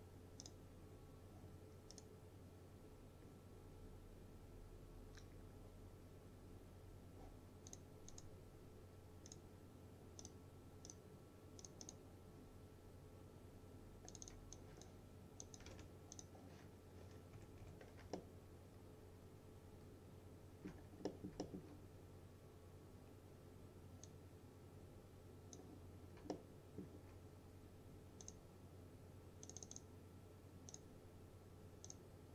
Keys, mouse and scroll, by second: 2.0 right click, 7.7 click, 15.4-16.2 typing, 16.2 click, 16.7 scroll up 1, 17.4 F4, 18.2-21.0 alt+middle drag, 20.9 scroll down 2, 21.1 middle click, 21.5 alt+middle click, 24.4-25.7 drag, 26.0-26.3 scroll up 2, 26.4-27.0 alt+middle click, 28.3 click.